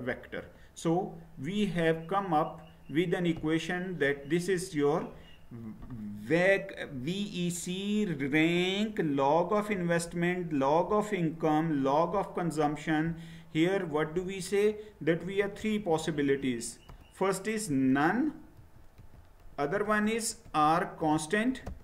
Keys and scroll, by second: 15.2-16.3 typing, 17.7-21.8 typing.